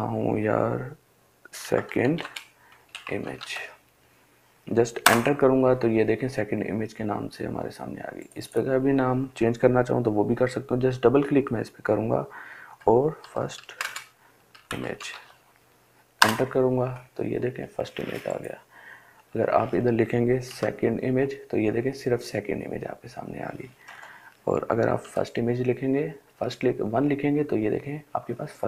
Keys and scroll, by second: 0.7-2.7 typing, 4.5 Return, 12.0-15.0 typing, 15.5 Return, 19.8 2, 23.2 BackSpace, 24.4 1, 28.4 BackSpace.